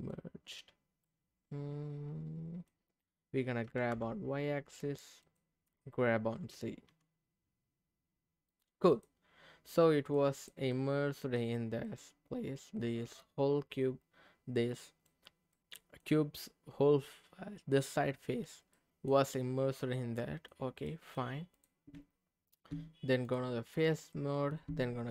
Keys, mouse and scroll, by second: 0.0 click, 0.4-1.1 scroll up 1, 1.1-2.7 middle drag, 3.7 g, 3.9 y, 5.2-6.4 drag, 6.4 g, 6.9 z, 8.5 click, 9.7 middle click, 10.3 click, 10.7 middle click, 11.8-15.1 middle drag, 15.5 middle click, 18.7 middle click, 20.2 middle click, 20.8 middle click, 21.5 click, 21.9 Tab, 22.6 Tab, 23.3 click, 23.8 middle click.